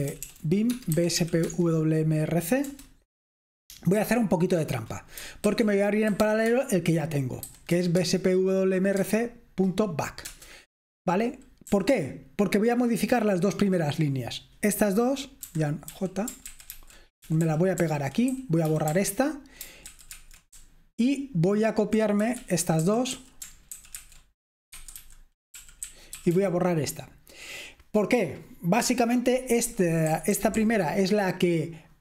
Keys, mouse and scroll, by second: 0.0-1.2 typing, 1.5 Tab, 2.7 Return, 5.5-7.7 typing, 8.0 Tab, 9.0 Tab, 10.5 Return, 11.9 typing, 13.4 typing, 15.5-15.9 typing, 16.5 ctrl+w, 16.8 ctrl+w, 17.1-23.7 typing, 19.9 ctrl+w, 20.2 ctrl+w, 23.8 ctrl+w, 24.8 ctrl+w, 30.1-30.6 typing.